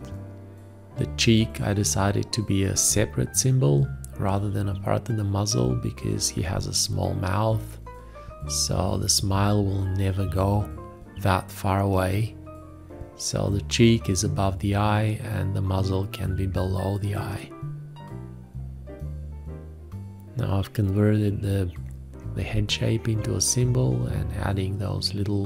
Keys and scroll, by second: 0.1 F2, 0.5 F5, 0.9 o, 1.5 d, 2.3 o, 2.7 q, 5.8 o, 6.2 a, 8.9 ctrl+Tab, 10.2 ctrl+Tab, 10.5 ctrl+Tab, 10.9 ctrl+s, 11.0 ctrl+a, 11.8-14.1 typing, 12.9 ctrl+s, 13.7 ctrl+s, 13.9 ctrl+Tab, 14.5 ctrl+Tab, 15.2 F8, 15.2-16.4 typing, 17.5 b, 18.9 ctrl+Tab, 19.1 ctrl+Tab, 19.3 space, 19.8 ctrl+a, 20.1 ctrl+z, 20.8 ctrl+space, 22.3 q, 24.1 BackSpace, 24.7 BackSpace.